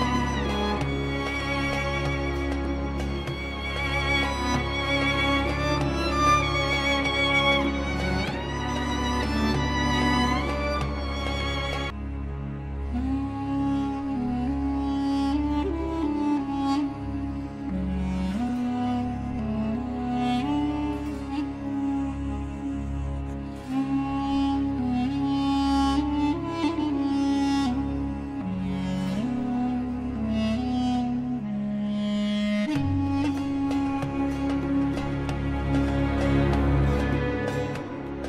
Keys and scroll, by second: 1.2 shift+F2, 2.3 F3, 14.0 0, 14.2 Return, 15.5 Escape, 16.1 F3, 20.5 shift+F2, 25.7 shift+F2, 34.2 F4.